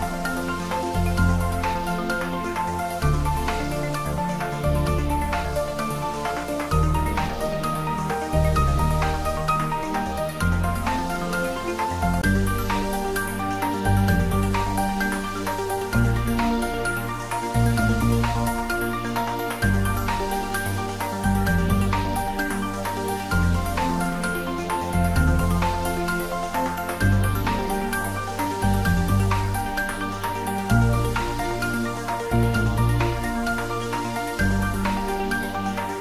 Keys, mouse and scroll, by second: 2.8 click, 6.4 click, 6.6 click, 12.7 click, 13.1 ctrl+s, 14.7 ctrl+s, 15.5 click, 28.5 click, 30.8 click, 31.2 click, 33.7-36.0 drag.